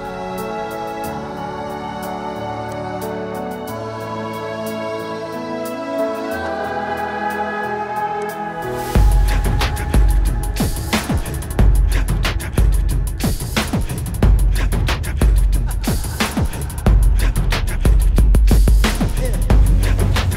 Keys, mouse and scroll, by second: 5.0 alt+scroll up 1, 5.8-6.2 scroll up 1, 6.2 scroll down 1, 6.7 alt+scroll up 1, 8.8 alt+scroll up 1, 10.6-11.2 alt+scroll up 3, 12.0-12.7 alt+scroll up 3, 15.6 right click, 15.7 Right, 16.0 Right, 16.2 Left, 16.5 Left, 16.7 Up, 18.1 Up, 18.1 alt+scroll down 1, 20.1 ctrl+t.